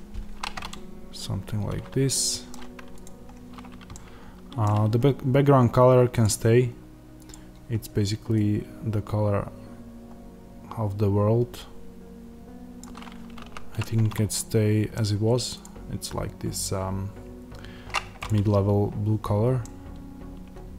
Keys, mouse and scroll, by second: 1.6-9.0 middle drag, 2.4-3.0 scroll down 1, 3.0 click, 8.3 click, 13.4 ctrl+z, 14.2-20.4 middle drag.